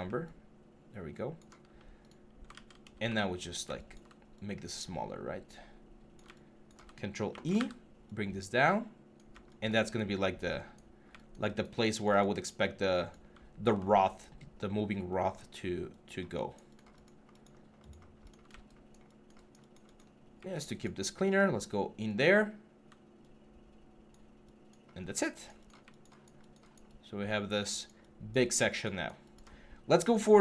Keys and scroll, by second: 2.3 ctrl+z, 7.1 ctrl+e.